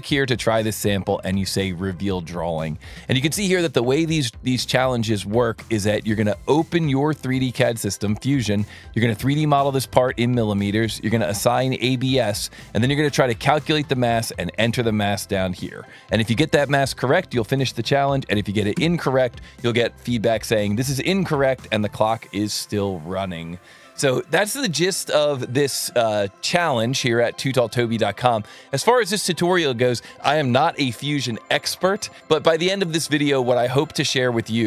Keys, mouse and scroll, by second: 1.5 click, 4.8 alt+1, 5.7 click, 6.6-7.6 drag, 8.8 click, 11.0 ctrl+shift+click, 12.6 ctrl+shift+click, 14.6 ctrl+shift+click, 15.7 alt+1, 17.2 click, 18.3 KP_1, 18.7 KP_Enter, 18.7 KP_0, 22.5 click, 24.9 click, 27.7 click.